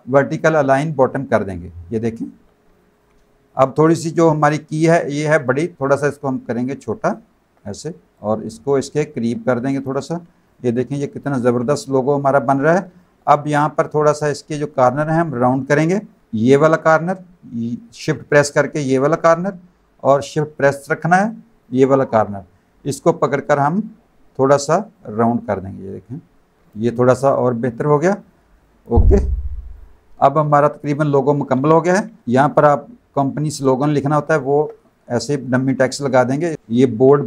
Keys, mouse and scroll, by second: 1.3 click, 2.1 click, 3.2 click, 4.8 click, 6.1 shift+click, 8.1 click, 9.8 click, 10.4 alt+click, 10.9 space, 11.0 click, 11.4 z, 11.7 click, 12.9 space, 12.9 click, 13.4 z, 13.5 click, 16.2 click, 16.4 click, 18.8 shift+click, 21.6 shift+click, 24.9 click, 26.6 z, 27.4 alt+click, 28.2 alt+click, 28.6 space, 29.5 v, 30.5 space, 30.6 click, 32.2 click, 33.6 alt+shift+click, 34.9 click.